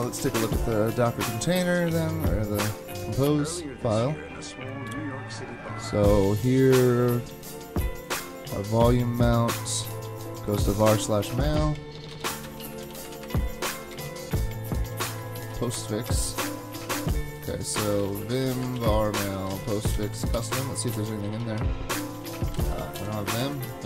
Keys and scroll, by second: 0.0 super+Tab, 10.8 super+Tab, 12.1-13.9 typing, 15.1-16.2 typing, 17.6-20.9 typing, 22.2-23.4 typing.